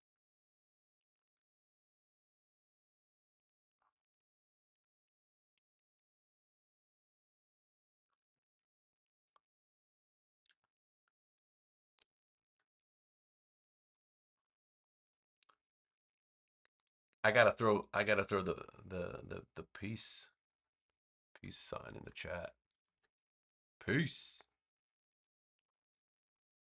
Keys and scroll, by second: 21.6-23.2 typing, 25.5 Return.